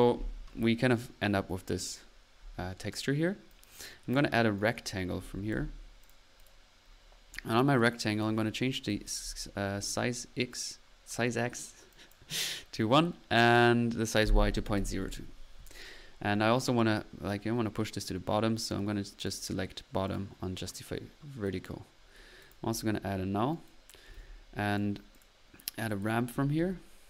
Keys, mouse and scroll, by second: 0.0 click, 0.0 n, 3.5 click, 4.6 right click, 4.9-6.0 typing, 6.8 middle click, 7.3-8.1 drag, 8.3-8.9 drag, 9.3 drag, 10.7-11.5 middle drag, 11.7-12.4 typing, 11.9 click, 13.4 click, 19.0-20.0 typing, 19.2 click, 20.1 drag, 21.4 click, 23.5 right click, 23.7-24.6 typing, 24.7 click, 25.9 middle click, 26.1-26.8 typing.